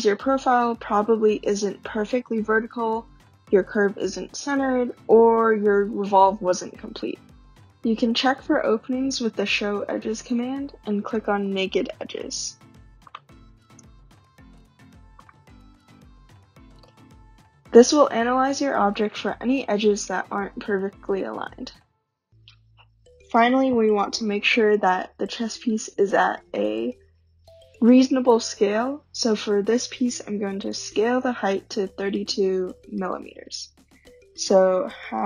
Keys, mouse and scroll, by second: 8.8-10.4 typing, 13.2 click, 13.7-14.3 typing, 15.3 click, 15.4 typing, 24.2-29.2 drag, 30.8 click, 34.9-35.2 typing.